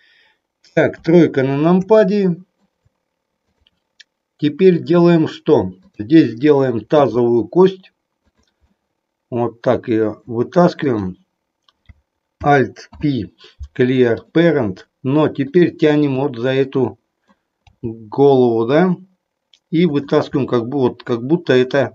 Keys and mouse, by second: 0.9 KP_3, 1.9 shift+middle click, 6.9 e, 8.4 click, 8.8-10.1 middle drag, 10.8 click, 12.9 alt+p, 15.4 click, 16.3-17.4 middle drag, 17.6 g, 20.4-21.9 middle drag.